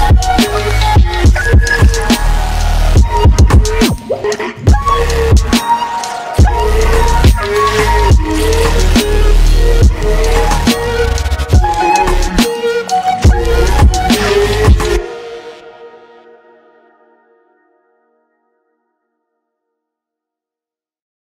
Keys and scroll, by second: 10.0 ctrl+t, 18.0 Return.